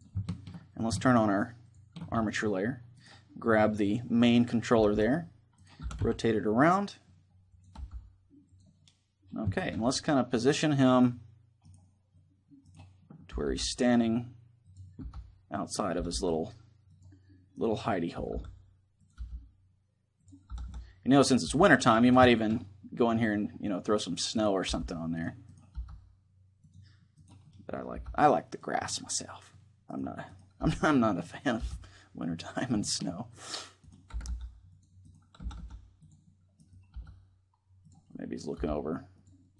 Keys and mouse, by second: 4.2 right click, 4.4 r, 5.4-7.3 right drag, 5.6 r, 7.4-10.1 drag, 7.5 g, 8.5 middle click, 9.6-11.2 middle drag, 10.2-14.2 right drag, 11.8-13.8 middle drag, 13.0 r, 14.4-17.3 drag, 14.8 g, 15.7 r, 17.8 r, 18.7 right click, 18.9 g, 19.1-23.2 drag, 20.2 r, 21.2 g, 24.1-28.6 right drag, 24.4 g, 25.4 g, 26.4-28.6 drag, 27.7 g, 29.0 click, 30.3-32.2 right drag, 30.3 g, 31.4 g, 32.8 click, 33.8 r, 34.4 click, 35.1 r, 36.7 g, 37.6 click, 38.3-39.3 drag, 38.3 g.